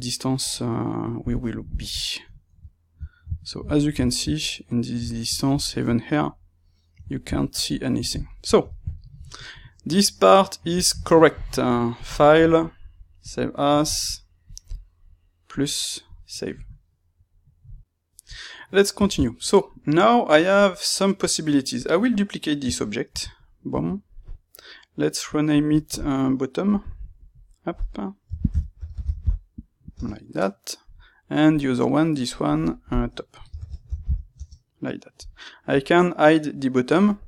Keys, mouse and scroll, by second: 1.5 KP_Divide, 1.9-13.3 middle drag, 16.1-17.8 drag, 17.8 n, 18.5-21.7 middle drag, 21.7 click, 23.1 shift+d, 23.7 Escape, 24.5 middle click, 25.4-27.2 drag, 27.3-31.5 drag, 28.8 t, 29.9 Return, 32.4 click, 32.6-35.7 drag, 34.4 Return.